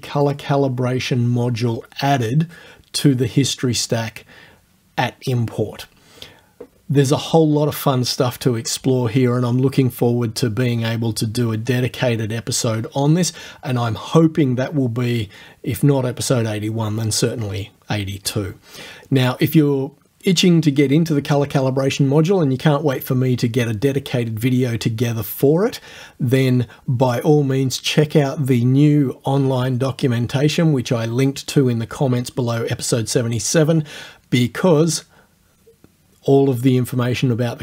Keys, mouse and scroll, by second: 0.3 click.